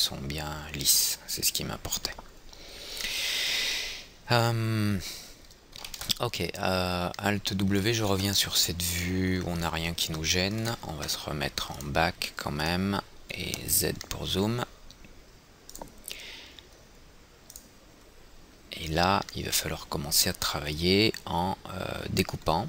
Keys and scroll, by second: 2.6 F3, 3.1 F3, 7.1 alt+w, 13.9 z, 14.6 z.